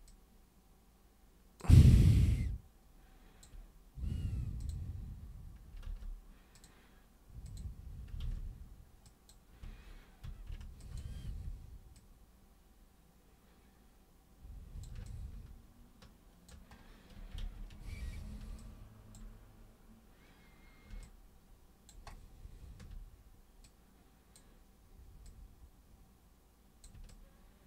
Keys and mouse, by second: 0.0 super+click, 1.9-3.4 alt+super+drag, 4.6 super+click, 5.9 ctrl+super+z, 6.5 super+click, 7.5 super+click, 8.2 ctrl+super+z, 9.0 super+click, 10.3 super+q, 10.8 ctrl+shift+super+click, 11.3 super+w, 11.9-14.8 super+drag, 15.0-16.5 alt+super+drag, 17.4 ctrl+super+z, 18.6 alt+super+click, 21.0 alt+super+click, 23.6-24.3 super+drag, 25.2 super+click, 27.1-27.6 alt+super+drag.